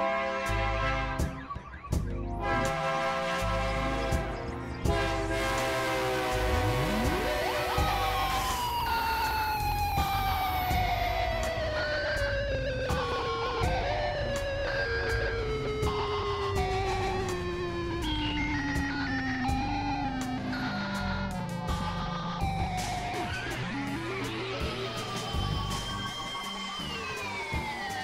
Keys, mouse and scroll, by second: 0.2 click, 0.9 click, 1.5 click, 2.2 click, 2.9-4.5 drag, 6.2 click, 7.4 click, 8.3 f, 8.6 click, 13.0-13.9 drag, 14.5 click, 15.1 click, 16.9 click, 17.5-20.2 drag, 20.8 click, 21.6-22.6 drag, 23.5 click, 24.7 click, 25.9 click.